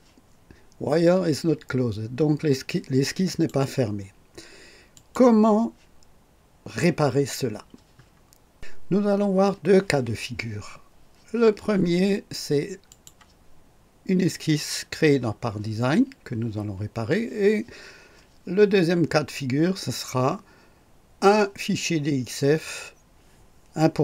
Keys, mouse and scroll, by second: 3.3 click, 4.9 click, 12.9 click.